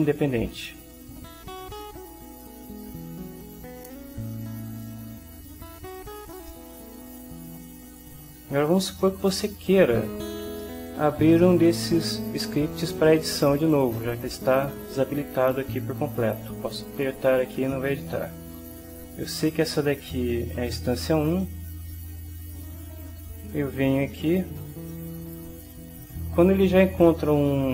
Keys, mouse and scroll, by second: 2.5 ctrl+w, 5.2 click, 6.4 click, 7.0 middle click, 7.6 click, 9.0 middle click, 9.3-10.5 drag, 10.6 click, 10.9 middle click, 11.4 shift+middle click, 11.6 shift+click, 11.6 shift+middle click, 14.8-16.4 right drag, 16.6-18.0 right drag, 19.5 click, 24.9 click.